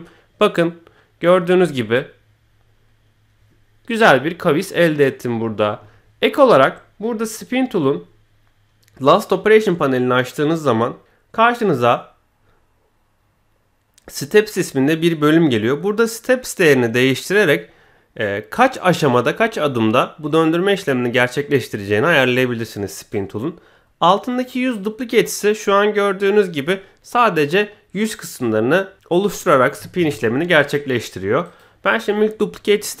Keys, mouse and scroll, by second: 1.5 scroll up 2, 1.8-5.1 middle drag, 7.3 click, 11.0 t, 15.5-23.1 drag, 24.6 click, 25.2-29.7 middle drag, 31.4 click, 32.9 middle click.